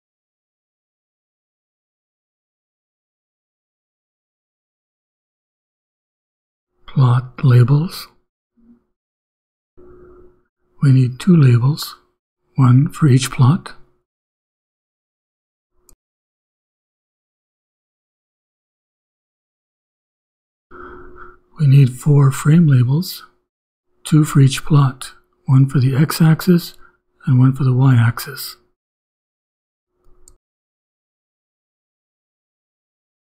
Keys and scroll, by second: 0.0-2.0 typing, 2.2 shift+Return, 4.6-9.0 typing, 5.2 Return, 10.8 shift+[, 11.2 shift+], 12.7-17.0 typing, 17.7 shift+Return, 20.3 ,, 20.8 Return, 21.4-25.5 typing, 26.6 shift+., 28.0 shift+[, 28.5 shift+], 30.5-32.4 typing.